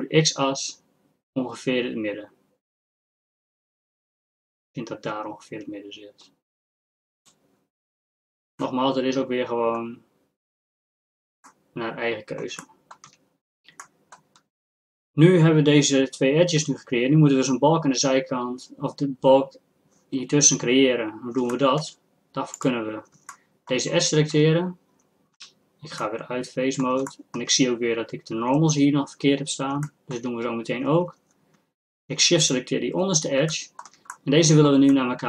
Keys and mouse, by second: 8.6-14.0 middle drag, 21.5 middle click, 22.6-26.0 drag, 26.0 middle click, 29.9-32.4 middle drag, 32.4-34.1 drag, 34.1-35.2 middle drag.